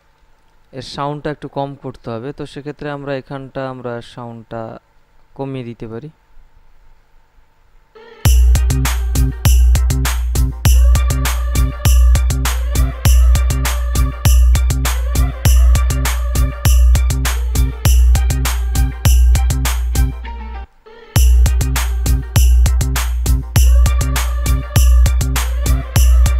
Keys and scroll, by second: 8.2 space, 20.9 space.